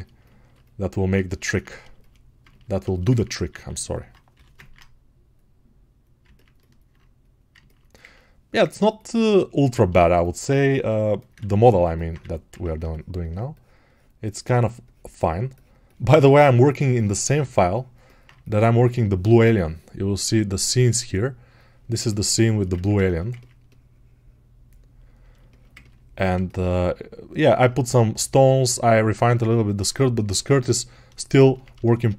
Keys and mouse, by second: 1.0-6.1 ctrl+alt+shift+drag, 6.1-21.8 ctrl+alt+right drag, 11.7 1, 21.8-32.1 alt+middle drag.